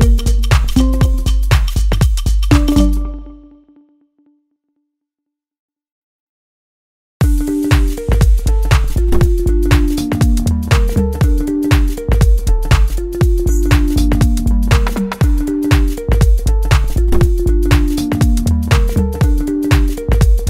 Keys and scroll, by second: 9.4 ctrl+z, 10.4 Right, 11.5 ctrl+z, 14.5 5, 14.8 Return, 17.5 Right.